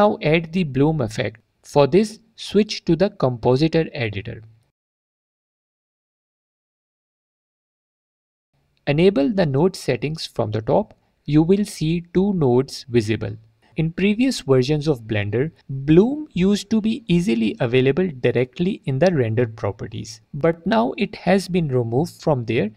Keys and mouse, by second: 4.9-7.7 drag, 9.6 click, 10.9-12.3 drag, 14.1 click, 17.6 click, 17.9 click, 19.1 middle click, 20.1 click, 21.1-22.7 drag.